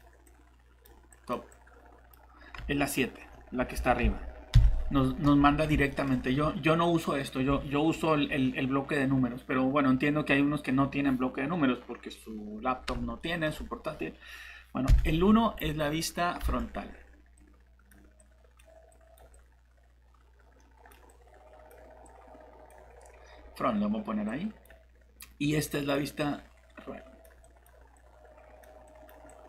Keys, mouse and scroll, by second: 2.6 alt+Tab, 3.7 alt+Tab, 4.0 alt+Tab, 4.5 7, 5.5 scroll down 1, 5.9 middle click, 14.9 shift+1, 16.4 alt+Tab, 17.4 click.